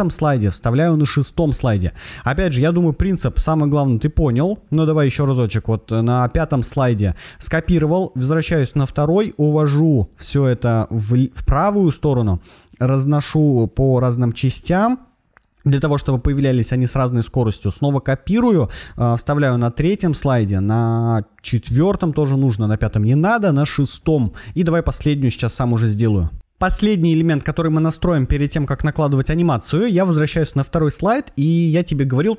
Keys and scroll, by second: 1.3 super+v, 4.6 super+c, 8.1 super+v, 15.8 super+c, 18.6 super+v, 21.5 super+v, 23.8 super+v.